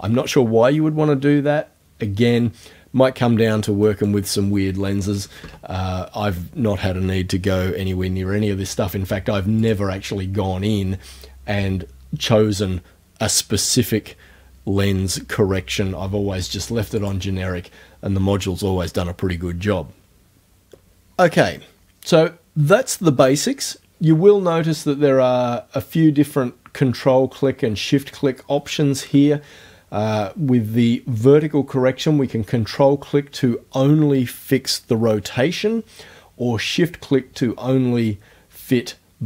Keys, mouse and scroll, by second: 3.9 right click, 5.3 KP_1, 5.4 KP_Enter, 9.6 click, 17.0 click.